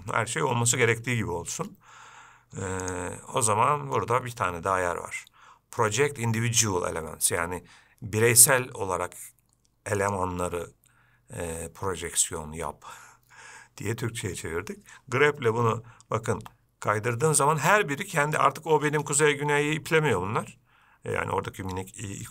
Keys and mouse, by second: 3.1-13.6 drag.